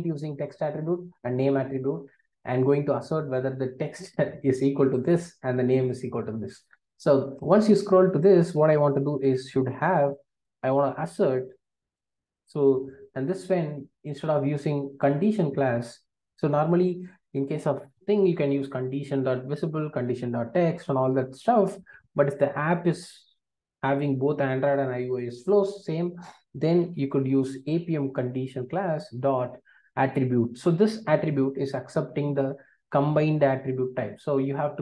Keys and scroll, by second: 10.4 Return, 28.6 Return, 33.5 Return.